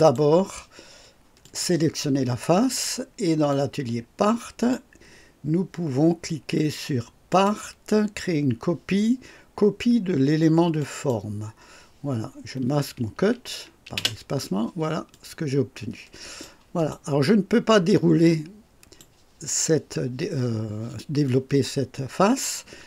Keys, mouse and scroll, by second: 1.3 click, 3.4-4.8 drag, 7.2 click, 10.7 click, 13.9 space, 15.0-16.5 drag, 16.7 click, 17.1-19.1 drag, 21.2-22.8 drag.